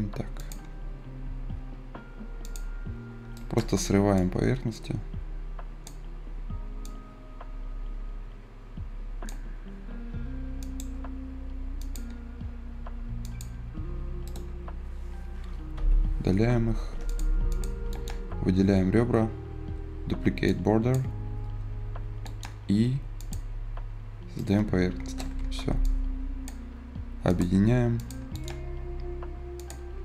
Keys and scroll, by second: 15.6 Delete, 25.3 Escape.